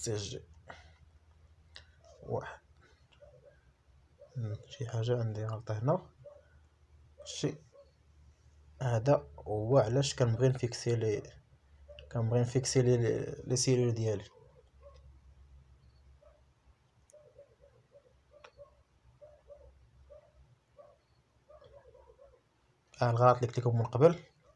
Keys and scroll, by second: 5.5 BackSpace, 6.0 shift+c, 7.0 shift+j, 7.6 Return.